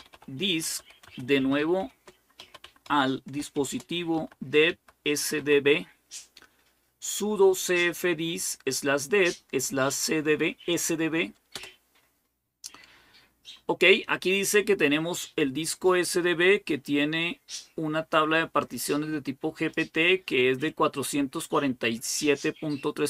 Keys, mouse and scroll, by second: 0.0-5.2 typing, 11.4 Return, 18.4-20.2 drag, 20.5-23.0 drag.